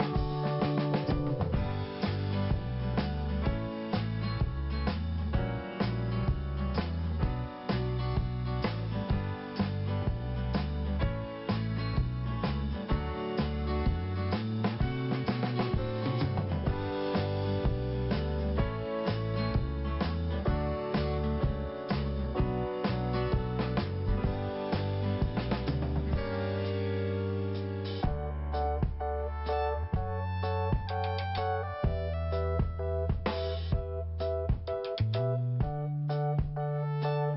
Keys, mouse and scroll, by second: 0.5 click, 1.5 click, 3.2 click, 4.0 click, 6.4 scroll down 1, 7.2 scroll up 2, 7.6 scroll down 2, 8.8 click, 9.4 scroll up 1, 9.8 click, 10.5 click, 12.2 scroll up 1, 14.3 click, 15.2 click, 17.0 click, 19.0 click, 19.6 click, 21.5 click, 24.0 click, 25.4 click, 26.4 scroll down 1, 27.3 scroll up 1, 28.4 click, 31.6 click, 31.7 click, 32.3 scroll down 1, 33.2 i, 34.0 click, 34.4 scroll up 1, 35.1-35.5 scroll up 1, 35.7 click, 36.8 click.